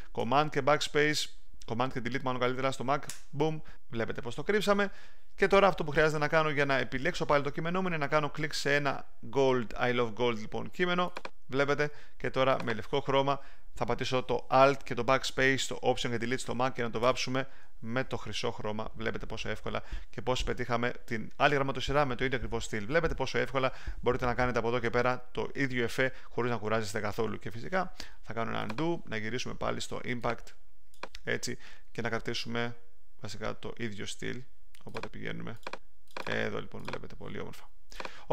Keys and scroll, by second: 3.0 super+BackSpace, 17.0 alt+BackSpace, 18.5 alt+super+d.